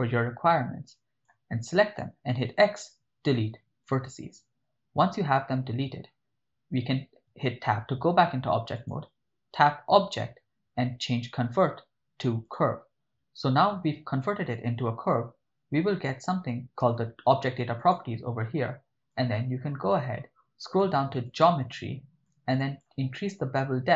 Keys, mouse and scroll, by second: 2.5 x, 7.3 Tab, 8.8 click, 12.6 click, 17.8 click, 19.2 click, 21.3 click, 22.3 click.